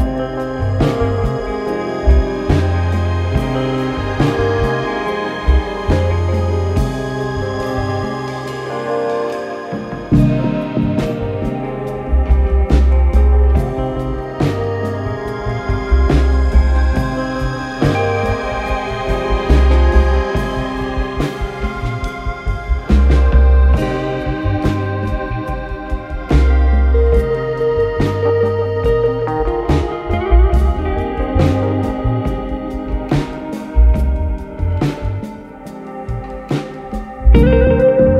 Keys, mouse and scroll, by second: 1.5 click, 3.0 click, 4.3 click, 7.8 click, 8.9 click, 10.8 click, 15.1 middle click, 15.4 F4, 17.0-17.6 scroll, 17.6 alt+middle click, 18.6 middle click, 19.4 middle click, 20.6 click, 21.4 click, 21.8 z, 22.8 alt+middle click, 23.5 F4, 24.2 right click, 25.3 click, 26.6 click, 28.2 alt+middle click, 29.4 click, 30.6 click, 30.9 s, 31.1 alt+scroll, 32.2 click, 33.4 click, 33.6 click, 34.0-34.8 typing, 35.9 typing, 36.4 right click, 38.0 click.